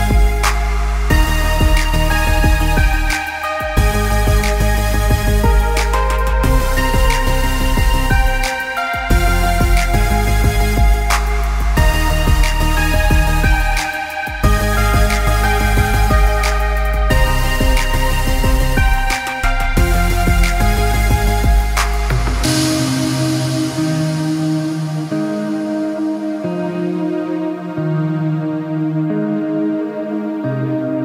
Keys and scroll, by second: 12.9 ctrl+0, 13.7 ctrl+0, 20.4 ctrl+0, 20.7 ctrl+=, 21.5 ctrl+space, 23.4 ctrl+-.